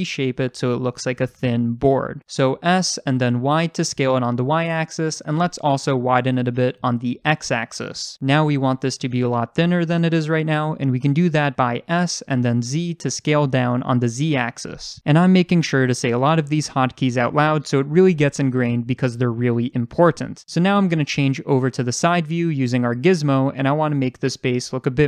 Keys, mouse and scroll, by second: 2.6 s, 5.5 click, 6.3 s, 11.3 click, 11.8 s, 20.0 click, 21.9 click, 23.0 scroll up 1.